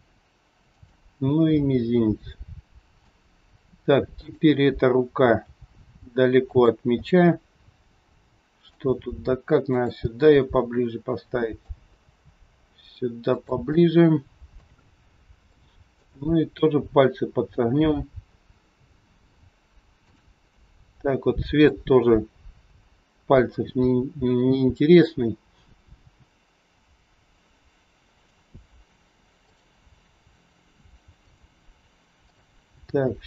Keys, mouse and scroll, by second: 1.0 scroll down 3, 1.5 middle click, 4.0 click, 5.3 g, 6.9 middle click, 9.7 g, 9.9 middle click, 11.9 g, 13.7 middle click, 15.4 shift+middle click, 16.1 middle click, 17.7 scroll up 2, 17.8-18.4 scroll down 1, 18.7 middle click, 20.0 click, 20.7 middle click, 29.4 click, 29.9 r, 32.2 click, 32.8 r.